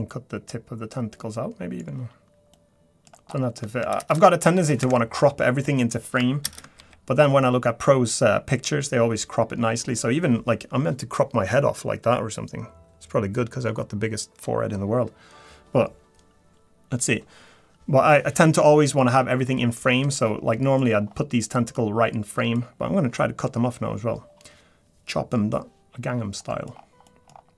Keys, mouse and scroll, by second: 2.5 middle click, 3.3-4.0 scroll down 4, 4.0 shift+space, 6.7 shift+space, 7.9 click, 20.5 middle click, 20.5 scroll down 1, 20.9 scroll up 4, 21.5 middle click, 22.0-22.4 scroll down 1, 22.4 middle click, 22.7 scroll up 2, 24.2-24.5 scroll up 2, 26.5 middle click, 26.7-27.1 scroll down 3, 27.0 middle click, 27.3-27.5 scroll up 4.